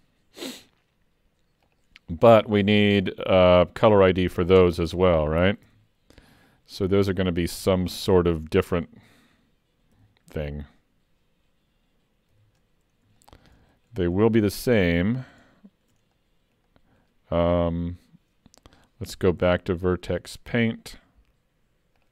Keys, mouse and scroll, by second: 1.7 Tab, 1.7 click, 2.8 middle click, 3.1 scroll up 2, 3.6 shift+middle click, 4.0 middle click, 4.6 Tab, 5.7 alt+a, 6.2 scroll up 1, 10.0 l, 12.3 l, 13.2 shift+middle click, 13.6 middle click, 15.4 shift+middle click, 16.2 middle click, 16.8 middle click, 20.1 click.